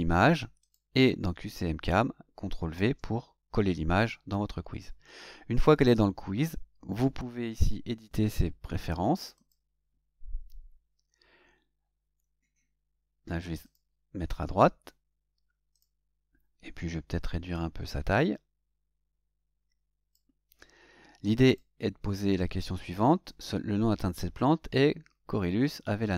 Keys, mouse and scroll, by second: 0.6 click, 1.8 click, 2.7 ctrl+v, 9.3 click, 13.6 click, 15.7 click, 18.1-20.3 drag, 21.4 click.